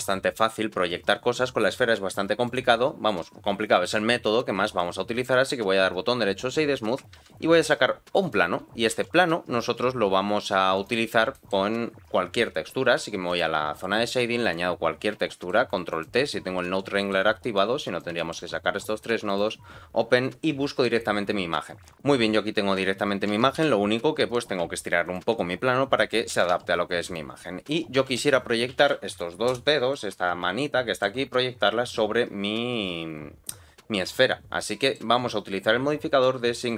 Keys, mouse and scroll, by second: 2.4-3.8 right drag, 4.1-4.7 scroll down 2, 4.7 middle click, 4.7 scroll down 1, 7.1 shift+a, 8.8 g, 11.0 scroll down 2, 11.3 shift+middle click, 13.3 click, 14.4 click, 14.8 scroll down 2, 15.2 shift+middle click, 15.9 click, 16.5 ctrl+t, 16.9 shift+middle click, 17.5 click, 18.1 shift+middle click, 18.5-19.3 scroll up 1, 19.3 click, 23.3 s, 26.3 g, 27.9 r, 29.9-31.0 middle drag, 34.6 middle click, 36.6 click.